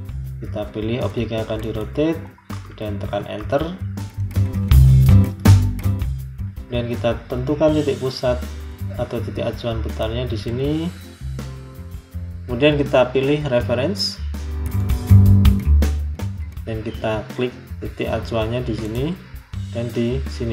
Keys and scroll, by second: 3.1 Return.